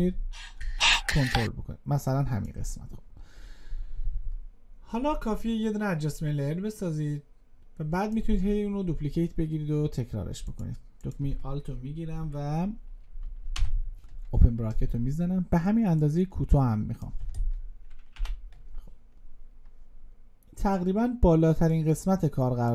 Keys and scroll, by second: 13.4 alt+[, 19.5 alt+].